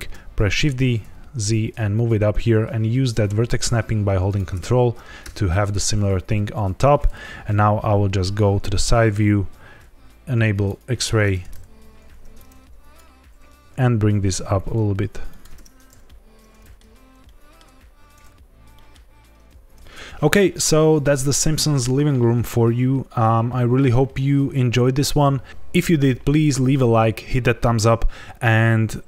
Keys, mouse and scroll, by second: 0.5 shift+d, 0.9 z, 4.2 ctrl+click, 5.2 Tab, 7.4 KP_3, 8.0 scroll up 3, 8.5 shift+middle click, 9.0-10.6 scroll up 1, 10.6 click, 11.2 Tab, 12.0 1, 12.3 click, 13.5 g, 13.5 ctrl+z, 15.2 shift+click, 15.5 Tab, 15.7 scroll down 2, 16.0 middle click, 16.9 scroll down 1, 17.2 shift+middle click, 17.7 scroll up 1, 18.7 middle click, 19.1 scroll up 2, 19.7 scroll up 1, 19.7 ctrl+s, 19.7 shift+middle click, 19.7 click.